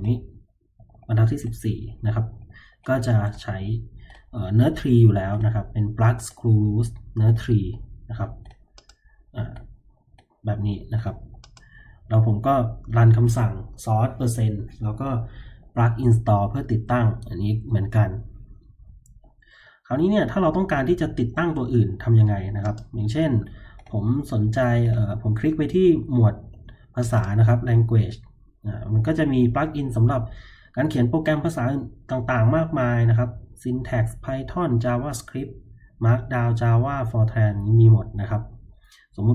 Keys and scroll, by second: 0.3-2.9 typing.